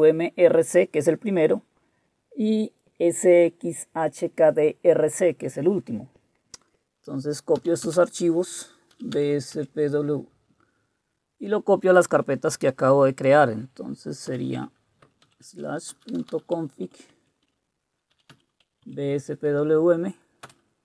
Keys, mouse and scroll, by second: 7.4-9.6 typing, 15.2-19.3 typing, 20.4 Return.